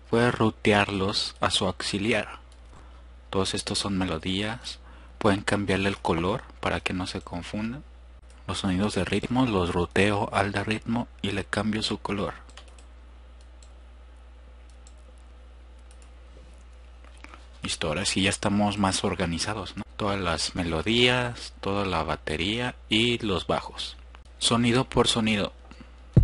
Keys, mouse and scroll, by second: 2.9-7.5 drag, 8.1-9.6 drag, 22.6-23.9 drag, 24.2 F1, 24.2 click, 24.9-25.7 drag.